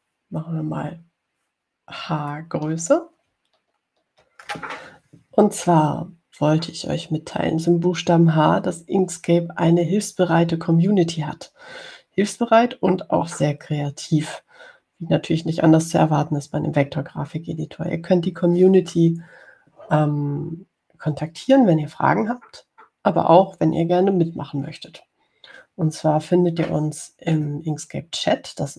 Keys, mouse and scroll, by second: 0.2 scroll down 2, 1.0 ctrl+scroll up 2, 1.9 ctrl+scroll up 2, 3.4 ctrl+scroll up 2, 5.0 ctrl+scroll down 2.